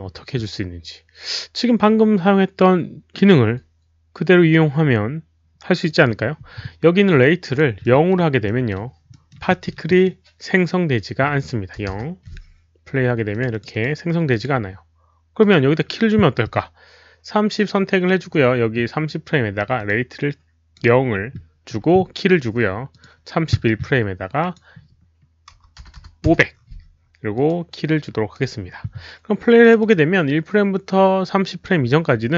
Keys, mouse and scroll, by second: 5.9 click, 7.4 click, 7.8 middle click, 8.4 middle click, 9.1 middle click, 9.5 middle click, 9.9 middle click, 10.0 click, 10.9 click, 11.7 KP_0, 11.9 Return, 13.3 click, 13.5 Return, 13.5 click, 13.5 middle click, 13.5 KP_0, 13.7 click, 14.3 Return, 14.3 click, 14.3 middle click, 14.3 KP_0, 15.4 click, 15.5 Return, 15.5 middle click, 15.5 KP_0, 18.0 click, 18.2 Return, 18.2 middle click, 18.2 KP_0, 19.7 click, 20.1-20.7 right drag, 20.7 Return, 20.7 click, 20.7 KP_0, 22.4 Return, 22.4 right click, 22.9 click, 23.7 click, 23.7 right click, 24.4 click, 24.4 right click, 27.3 click, 27.7-28.3 right drag, 27.7 KP_0, 27.7 KP_5, 29.6 Return, 29.6 click, 29.6 right click, 29.6 KP_0, 29.6 KP_5, 29.8 click.